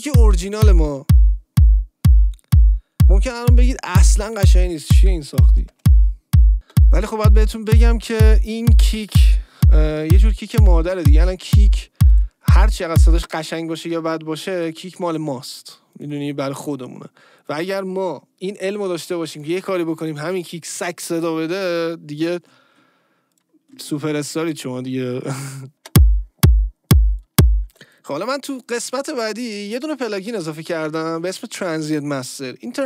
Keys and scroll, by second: 6.5 space, 8.9 space, 9.7 BackSpace, 13.1 space, 25.7 space, 27.6 space.